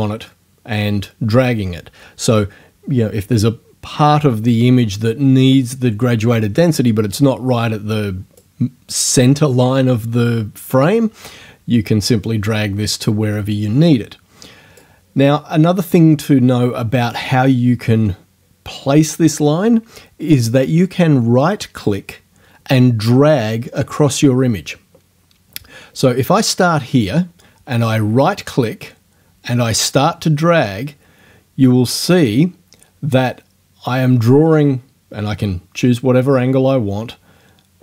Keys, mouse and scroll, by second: 12.3-15.0 drag, 27.9-37.8 right drag.